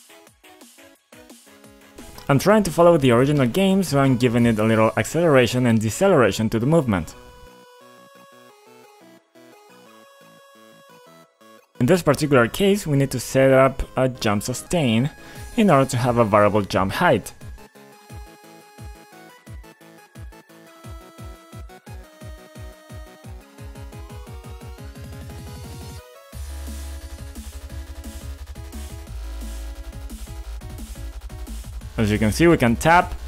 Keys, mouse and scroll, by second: 0.3-1.4 typing, 1.7 Tab, 2.9-9.8 typing, 8.7 Tab, 9.8 Tab, 10.7 Tab, 17.6-18.4 typing, 20.5 Tab, 22.1 Return, 23.2 click, 24.6 F5, 26.8 click, 28.8 a, 29.5 Left, 30.5 Right, 30.7 Up.